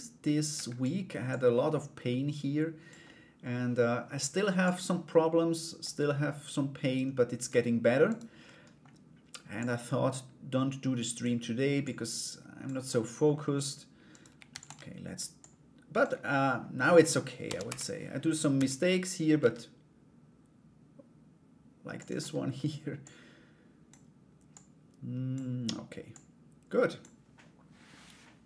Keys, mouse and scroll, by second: 0.9-2.5 drag, 2.6 middle click, 3.0-5.1 scroll down 1, 5.1 scroll down 1, 5.4-7.0 drag, 7.7 right click, 8.0 middle click, 9.2-10.8 drag, 11.4 click, 12.5 middle click, 13.7 right click, 14.1 shift+d, 14.9 click, 16.4 middle click, 17.0 r, 21.8 middle click, 22.6 click, 24.1 click, 25.7 click.